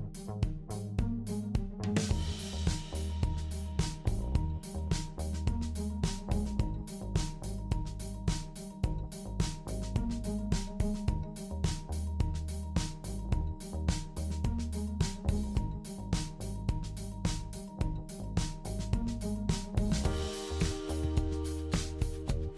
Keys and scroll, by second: 16.3-17.5 typing, 19.4 super+c, 19.7 super+v.